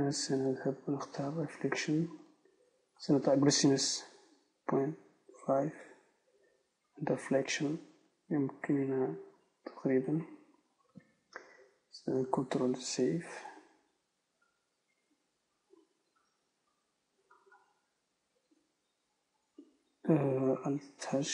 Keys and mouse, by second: 0.4-5.6 right drag, 8.3-9.8 drag, 12.2-18.1 right drag, 13.0 ctrl+s, 18.1 Tab, 18.5 z, 21.0 alt+h.